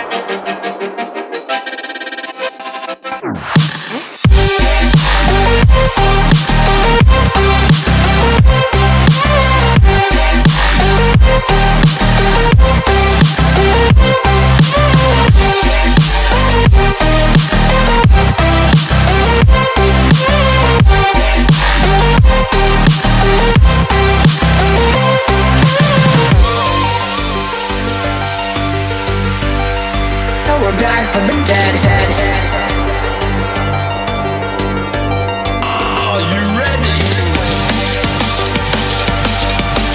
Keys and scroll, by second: 0.5 v, 0.9 Tab, 7.4-8.3 typing, 9.9 space, 10.4 super+space, 10.5 super+space, 16.8 space, 17.3 alt+super+space, 17.4 alt+super+space, 17.5 alt+super+space, 17.5 alt+super+space, 17.6 alt+super+space, 17.7 alt+super+space, 17.8 alt+super+space, 17.9 alt+super+space, 18.0 alt+super+space, 18.0 alt+super+space, 18.2 alt+super+space, 18.2 alt+super+space, 18.3 alt+super+space, 18.6 alt+super+space, 18.7 alt+super+space, 18.8 alt+super+space, 18.9 alt+super+space, 19.0 alt+super+space, 20.3 Escape, 26.5 m, 29.6 v, 32.7 shift+super+F5, 34.7 BackSpace, 37.2 o.